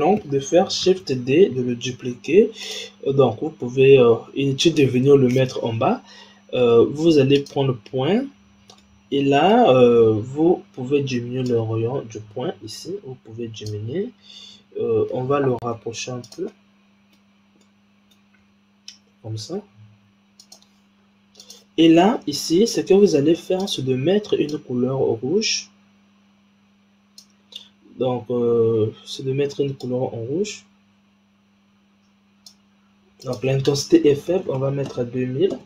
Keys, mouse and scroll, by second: 0.9 shift+d, 7.3 click, 8.8-11.4 middle drag, 11.4-14.4 drag, 15.7 g, 16.4 middle click, 17.3-17.6 scroll down 3, 17.6-18.3 middle drag, 18.3 g, 21.3 click, 22.4-23.5 scroll up 2, 23.5 click, 29.7-32.8 drag, 33.1-34.3 drag, 34.3 KP_0.